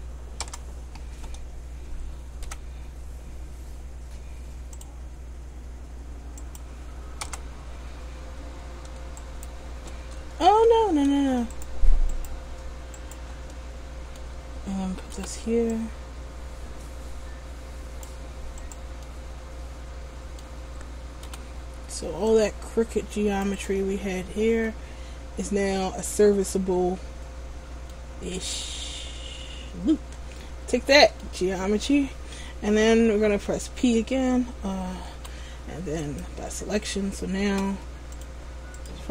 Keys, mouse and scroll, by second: 2.6 k, 9.4 alt+right click, 10.6 ctrl+z, 11.7 shift+right click, 12.3 alt+right click, 13.1 shift+right click, 13.7 middle click, 15.3 c, 18.9 right click, 19.2 middle click, 21.4 c, 23.8 right click, 24.2-24.6 scroll down 1, 24.8 middle click, 28.9 middle click, 35.3 p, 37.1 scroll down 2, 38.3 click.